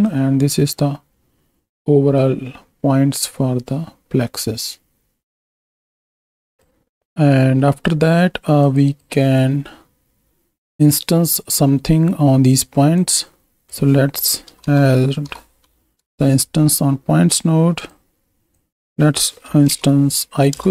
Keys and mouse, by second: 0.2-1.7 drag, 2.1-6.6 drag, 7.0 ctrl+space, 7.5 click, 8.6 click, 8.8 click, 9.2-11.4 drag, 12.9-15.9 drag, 17.7 click, 18.5-20.5 drag.